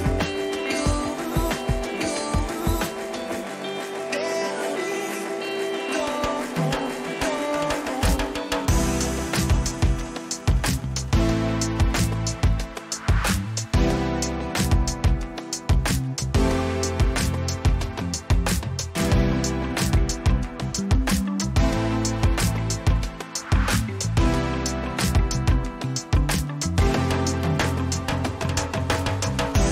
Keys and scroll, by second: 0.0 ctrl++, 1.4 ctrl+-, 11.1 ctrl+c.